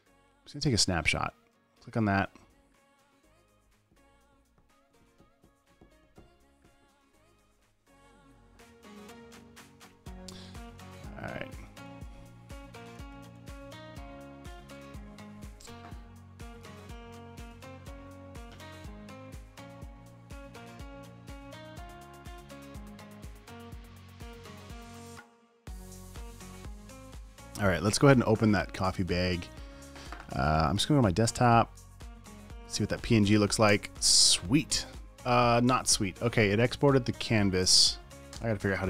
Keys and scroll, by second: 13.4-15.9 typing, 34.2 space.